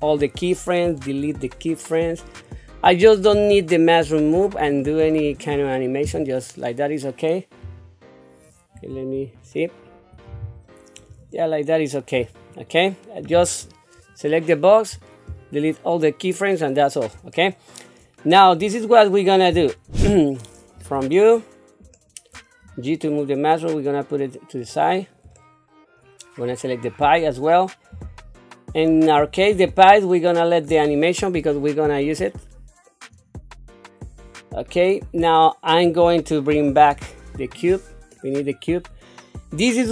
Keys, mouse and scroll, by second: 1.0 Delete, 2.4 click, 4.6 click, 7.6 Delete, 9.0 ctrl+z, 9.8-10.3 scroll down 2, 10.7 shift+middle click, 11.3 middle click, 14.1 click, 17.3 shift+middle click, 18.2 scroll down 2, 18.8 shift+middle click, 19.7 scroll up 2, 20.8 KP_1, 21.9 shift+middle click, 22.7 g, 25.3 shift+middle click, 26.6 click, 27.9 g, 29.9 shift+middle click, 31.4-33.1 drag, 34.2 shift+middle click, 34.9-35.8 scroll up 2, 36.5 alt+h, 38.2 scroll up 3, 38.8-39.4 scroll down 3, 39.4-39.9 scroll up 2.